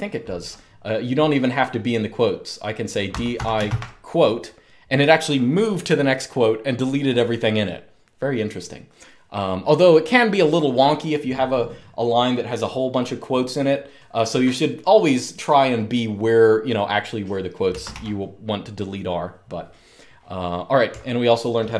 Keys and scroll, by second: 2.5-3.8 typing, 17.5 Escape, 17.6 u, 20.6-21.7 typing.